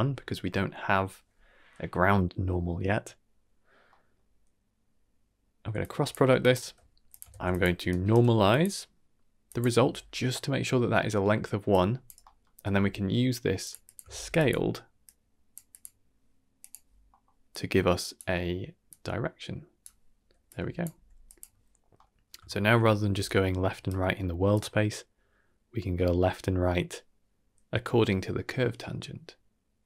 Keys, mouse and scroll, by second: 3.9 middle click, 5.8 drag, 6.4 click, 7.1 click, 7.3 shift+d, 7.8 alt+right drag, 8.5-9.5 drag, 11.7-12.0 drag, 12.2 middle click, 12.7 g, 13.8 click, 14.1 shift+d, 15.0-15.5 drag, 15.7-16.7 drag, 17.1 middle click, 17.5 click, 18.8 click, 20.4 click, 20.9 g, 21.7 scroll down 1, 21.9-22.3 middle drag, 22.4 shift+middle click, 22.9 scroll down 2, 23.1 d, 23.2 right click, 23.8 d, 23.9 d, 24.5-29.8 drag.